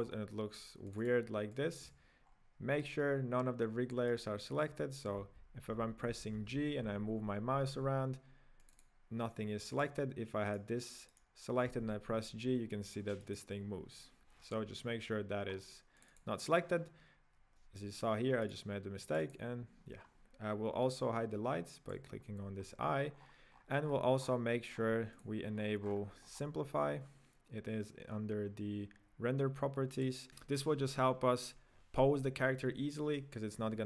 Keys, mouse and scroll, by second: 0.1 click, 0.9 click, 1.5 click, 2.0 click, 2.3-2.7 scroll down 3, 3.0 right click, 3.0-3.5 scroll down 3, 4.1-5.2 right drag, 5.2-6.9 typing, 8.6 click, 8.9 click, 9.6 click, 9.9 click, 10.5 right click, 11.3-11.8 right drag, 11.8 g, 15.5-16.0 scroll up 3, 16.0 click, 16.3 drag, 18.6 right click, 19.1 click, 20.0 scroll up 2, 21.8 click, 22.6-23.2 scroll up 2, 23.2-24.0 scroll down 16, 24.2-25.1 scroll up 12, 25.1 click, 25.6 scroll down 7, 25.8-26.2 scroll up 8, 26.4-29.3 scroll down 7, 30.1 click.